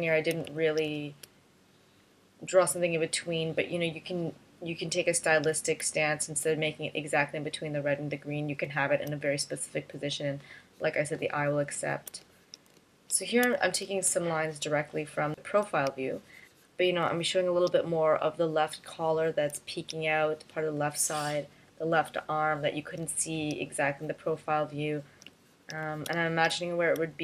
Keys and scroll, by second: 0.3 space, 1.3 space, 6.0 space, 9.1 space, 12.2 space, 13.7 space, 14.3 space, 26.3 space, 27.0 space.